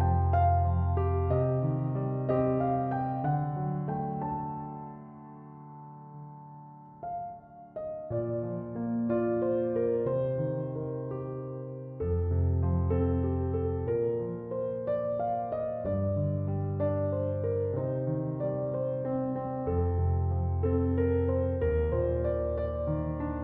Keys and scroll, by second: 4.1 space.